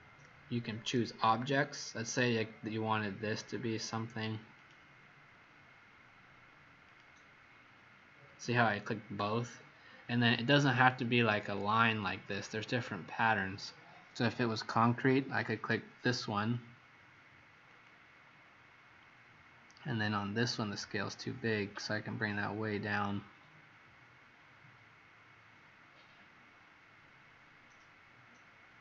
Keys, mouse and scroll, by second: 4.5 click, 11.8 click, 12.2 click, 17.6 click.